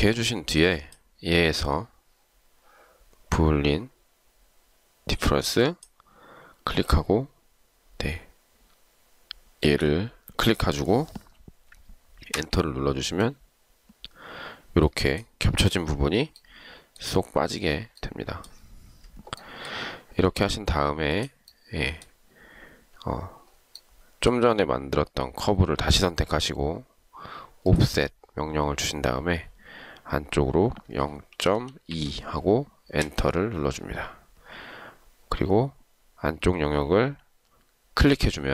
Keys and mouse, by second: 12.4 Return, 31.2-32.4 typing, 33.1 Return.